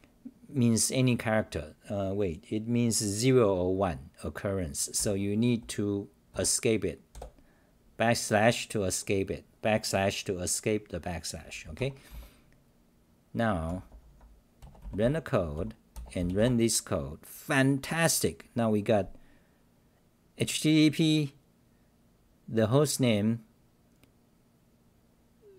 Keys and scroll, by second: 5.0 u, 11.8 Home, 12.1 t, 13.7-15.5 typing, 16.3 Delete, 18.7-19.4 typing.